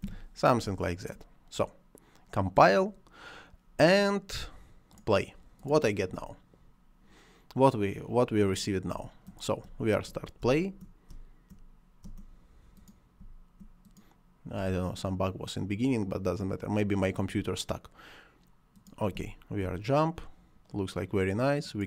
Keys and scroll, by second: 8.8 space, 19.0 space.